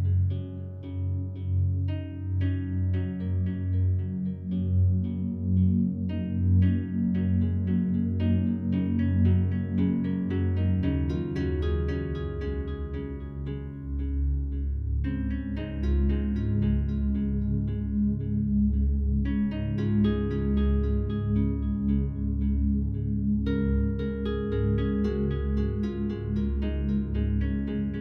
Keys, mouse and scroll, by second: 0.4 click, 2.5 click, 4.3 click, 5.7 click, 8.0 click, 9.2 click, 11.1 click, 12.1 click, 13.2 click, 14.0 click, 15.1 click, 16.5 click, 17.6 click, 19.0 click, 19.4 click, 19.6 click, 20.3 click, 21.9 click, 24.1 Delete, 24.8 Delete, 25.6 click, 26.8 click.